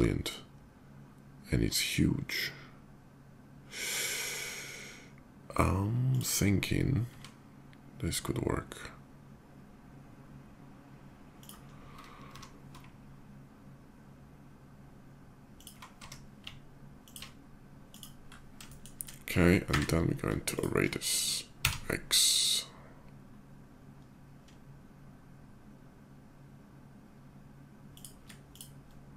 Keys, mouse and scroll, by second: 5.8 click, 8.9 s, 11.1 click, 14.2 ctrl+g, 15.3 ctrl+click, 16.1 d, 16.8 alt+d, 16.8 click, 17.7 click, 18.1 alt+middle drag, 19.4 q, 20.2 shift+click, 21.5 x, 27.7 shift+click, 28.2 shift+click.